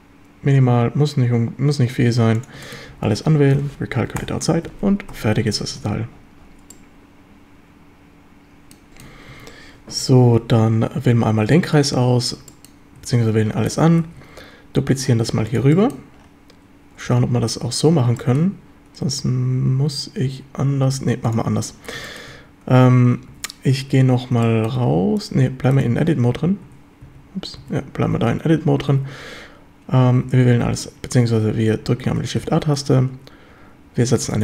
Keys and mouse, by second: 2.4 click, 2.7 shift+middle drag, 2.9 a, 3.3 a, 3.6 space, 4.6 a, 5.1 Tab, 5.6 ctrl+s, 5.8 a, 6.7-8.8 middle drag, 8.9 shift+middle drag, 8.9 shift+KP_7, 9.3 Tab, 9.9 a, 10.4 z, 12.0 a, 12.5 shift+middle drag, 14.0 shift+d, 15.6 click, 15.8 shift+click, 17.1 g, 17.8 drag, 18.2 shift+drag, 21.0 x, 22.1 shift+drag, 22.8 Tab, 23.3 a, 24.5 shift+drag, 25.8 click, 26.7 Tab, 27.1 a, 27.6 a, 28.2 a, 28.9 a, 30.3 a.